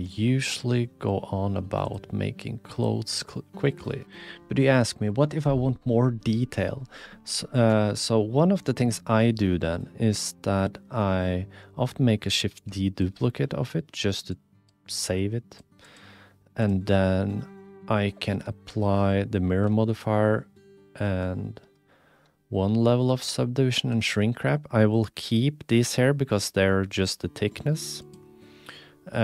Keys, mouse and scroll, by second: 1.8 click, 2.8 click, 3.2 click, 4.0 ctrl+alt+KP_1, 12.6 shift+d, 14.3-15.5 drag, 15.8 click, 17.1-18.1 drag, 19.4 ctrl+a, 23.1 ctrl+a, 23.9 ctrl+a, 28.0-29.2 drag.